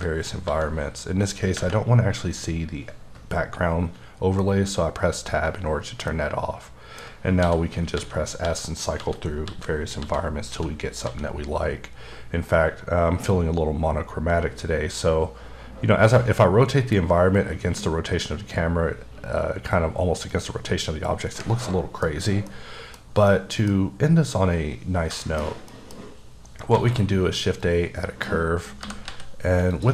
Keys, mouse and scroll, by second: 1.2 s, 3.3 click, 4.4 scroll up 1, 6.1 shift+middle click, 7.4-11.0 typing, 13.3 typing, 20.3 click, 21.6 middle click, 22.0 scroll up 3, 22.5 middle click, 22.6 scroll down 1, 23.3 middle click, 24.9 scroll down 2, 25.2 shift+middle click, 26.7 shift+a, 27.6 click, 29.0 g, 29.1 z, 29.7 click.